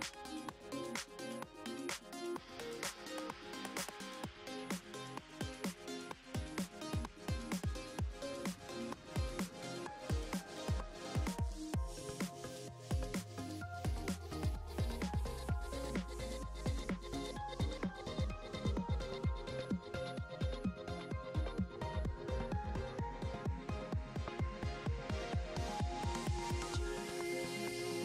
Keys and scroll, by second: 22.6 ctrl+z.